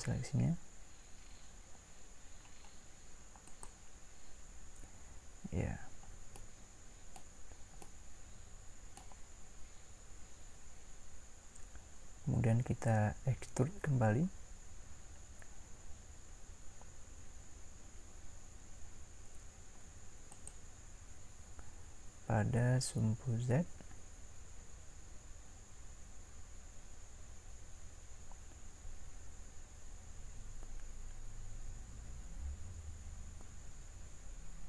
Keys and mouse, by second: 3.5-8.1 drag, 8.1 middle click.